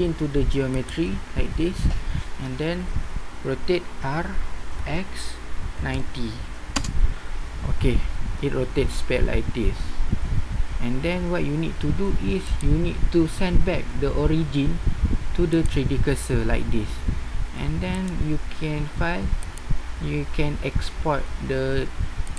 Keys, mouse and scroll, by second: 4.0 r, 12.4-13.9 drag, 13.9 middle click, 19.1 middle click, 21.1 typing.